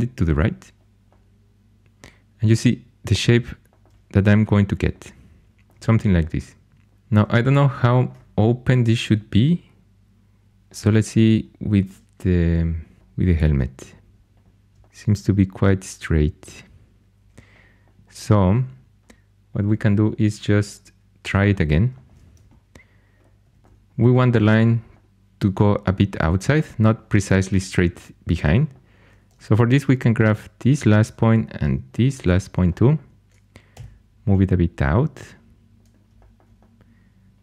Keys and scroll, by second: 17.1 x, 23.3 1, 24.5 2, 29.2 1, 33.6 g.